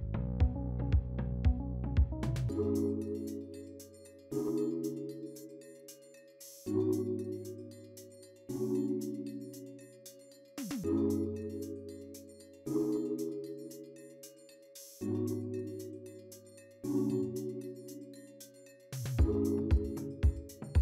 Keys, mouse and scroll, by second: 10.8-11.8 scroll up 2, 11.9-12.6 scroll down 3, 12.6-12.9 scroll down 1, 12.9-13.4 scroll up 3, 14.4 scroll down 1, 15.3 scroll down 2, 16.1-16.9 scroll up 2, 16.9-19.7 scroll down 4, 19.7-20.2 scroll down 1.